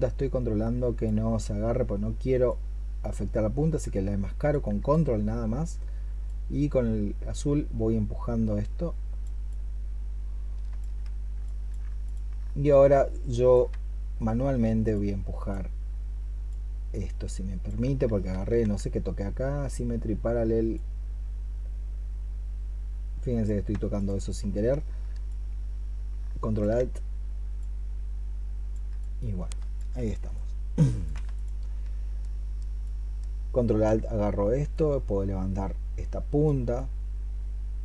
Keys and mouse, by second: 2.3 ctrl+click, 11.9 ctrl+click, 17.9 ctrl+z, 23.8 ctrl+click, 31.2 ctrl+click, 32.1 ctrl+click.